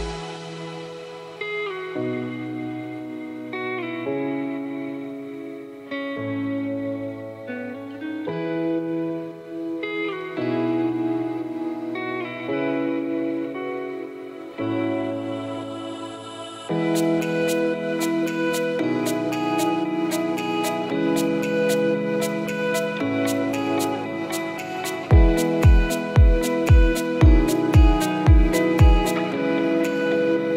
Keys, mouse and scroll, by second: 0.0 click, 4.3 click, 7.1 click, 9.1 click, 15.6 click, 20.0 click, 21.7 click.